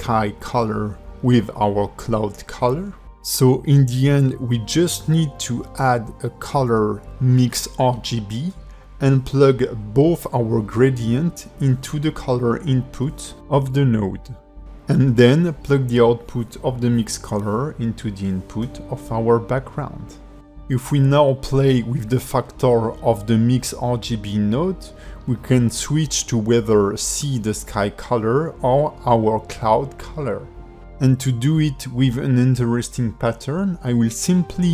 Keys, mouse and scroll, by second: 0.2 g, 1.8 click, 2.2 g, 3.0 shift+middle click, 3.5-4.2 scroll down 2, 4.8 click, 5.5 shift+x, 5.9 shift+a, 10.3 click, 12.8 click, 14.8 click, 15.9 click, 17.8 click, 19.6 click, 22.2 click, 24.4 scroll down 2, 24.6 alt+middle click, 25.4 click, 27.3 scroll down 1, 27.4 middle click, 28.0 shift+middle click, 28.7 middle click, 29.8 click, 30.2 KP_Decimal, 30.6 middle click, 30.8 ctrl+middle click, 31.3 shift+middle click, 31.6 ctrl+middle click, 31.9 middle click, 33.4 scroll down 4, 33.5 shift+middle click, 34.1 click, 34.5 scroll up 4.